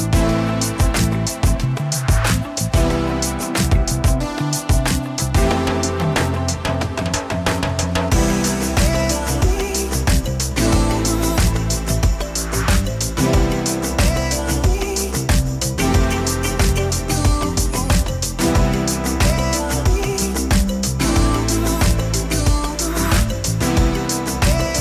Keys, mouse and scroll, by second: 0.6 click, 0.6 f, 1.7 middle click, 2.4 f, 2.6-3.5 drag, 4.6 middle click, 5.4 click, 7.1 middle click, 7.6-10.8 drag, 10.5 scroll down 1, 10.6 middle click, 11.4-12.4 drag, 12.8 middle click, 13.8-14.9 drag, 14.7-16.2 middle drag, 16.2 click, 16.9 click, 16.9 f, 17.9 middle click, 18.9 click, 20.1 middle click, 20.8 click, 22.1 middle click, 22.9-24.1 drag, 24.5-24.8 middle drag.